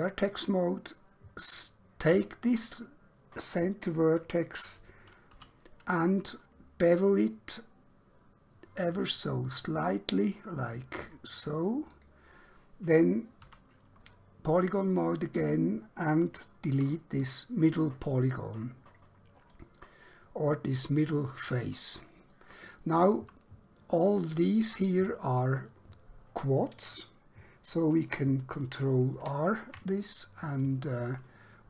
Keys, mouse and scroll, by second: 0.0 click, 2.2 scroll up 1, 5.4 q, 6.8 click, 11.9 click, 13.5 3, 14.1 scroll up 1, 16.0 scroll down 1, 16.8 x, 19.7 click, 20.3 scroll down 1, 21.6 scroll up 1, 22.4 shift+middle click, 28.2 ctrl+Num_Lock, 29.2 ctrl+r, 30.4 scroll up 1.